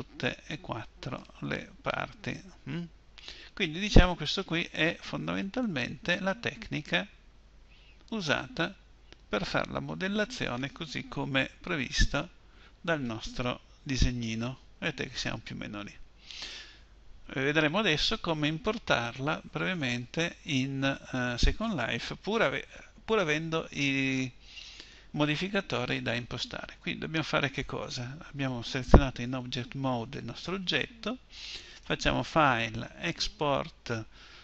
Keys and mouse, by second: 11.6 KP_1, 13.8 z, 14.5 z, 15.5 z, 15.9 z, 29.1 Tab, 31.5 click.